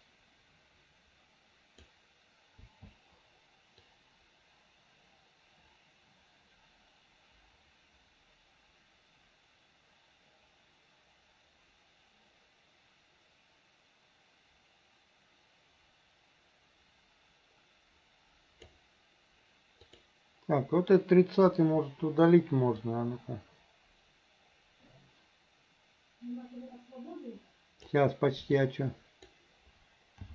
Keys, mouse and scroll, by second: 0.1-1.9 drag, 2.7 i, 3.9-18.8 drag, 19.8 click, 21.5 Delete, 22.9-28.0 drag, 28.6 click, 28.7-29.3 drag, 30.2 g.